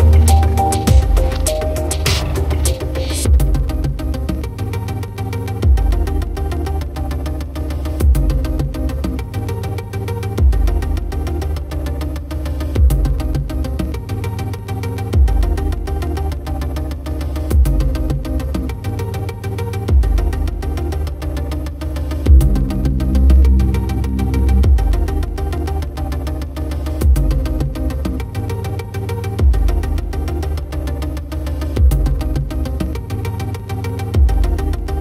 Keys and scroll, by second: 4.1 ctrl+t, 7.7-10.9 typing, 13.6-15.5 typing.